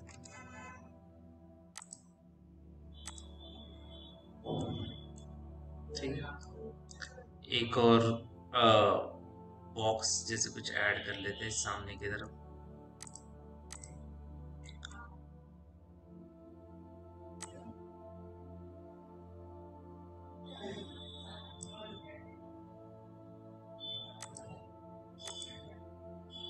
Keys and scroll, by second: 0.0 KP_0, 0.0 Tab, 10.8 t.